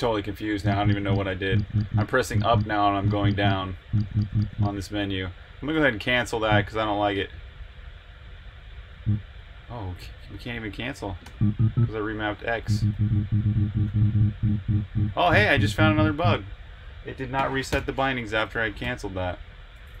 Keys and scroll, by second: 11.2 Return.